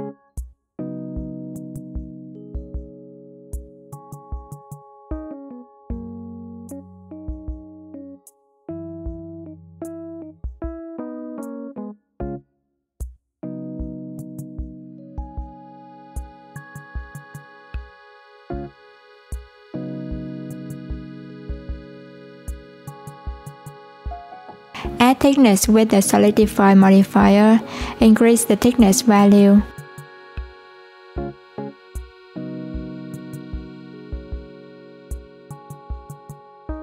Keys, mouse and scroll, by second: 2.3 Tab, 3.9 2, 4.0 click, 5.1 shift+click, 6.3 alt+z, 7.0 click, 8.1 shift+click, 8.7 x, 10.6 click, 11.5 shift+click, 12.5 click, 15.5 alt+click, 16.6 click, 18.7 alt+z, 21.4 click, 23.7 Tab, 24.5-27.6 drag, 30.1-36.8 drag.